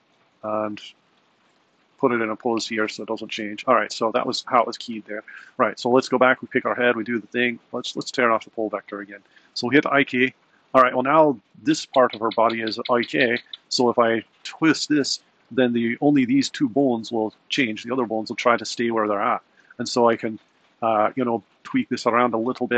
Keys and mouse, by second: 0.7 Right, 1.0 Left, 3.2 click, 13.6 click, 14.2 r, 17.3 r, 21.5 r.